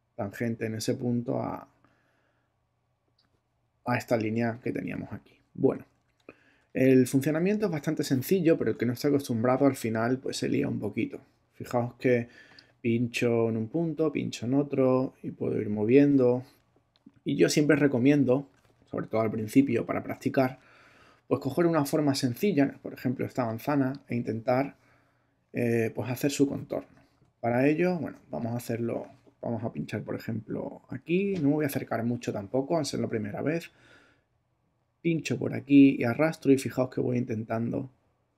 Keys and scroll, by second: 5.6 super+z, 6.8 alt+super+z, 8.6 alt+super+BackSpace, 9.2 BackSpace, 19.5 super+BackSpace, 20.8 super+BackSpace, 23.2 space, 27.1 super++, 28.1 super+space, 28.6 space.